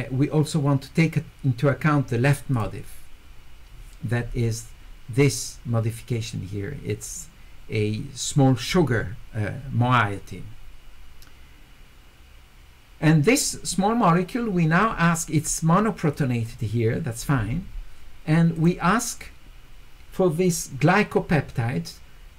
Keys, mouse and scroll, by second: 2.5 click, 16.1 click, 18.6 click.